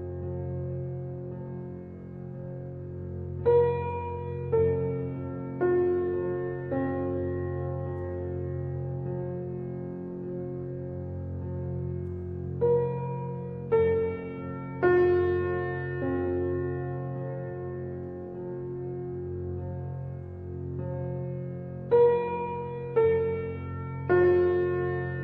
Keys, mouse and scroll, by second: 0.3-1.7 middle drag, 1.7 ctrl+r, 5.0-5.4 scroll down 1, 5.4 middle click, 6.3-7.4 scroll up 1, 7.4 ctrl+r, 8.8-9.3 scroll down 3, 9.3-13.2 middle drag, 13.2-14.4 drag, 14.8 middle click, 15.6 shift+d, 19.9 ctrl+z, 21.3 g, 23.7 shift+d.